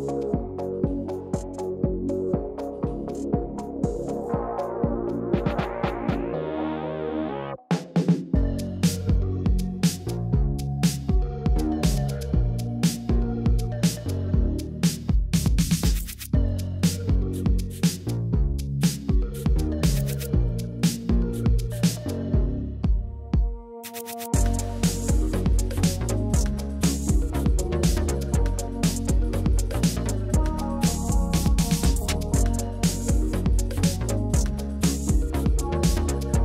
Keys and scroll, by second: 1.1 ctrl+v, 2.4-4.0 typing, 5.4 Down, 5.5 Down, 6.0 Left, 6.7 shift+Left, 7.1 Right, 7.2 Right, 7.3 Right, 7.4 Right, 13.3 Right, 21.1-24.5 typing, 26.9-28.7 typing, 28.9 ctrl+v, 31.2-32.0 typing, 32.3 Down, 32.5 Down, 32.7 Up, 33.0 Return, 35.1-36.4 typing.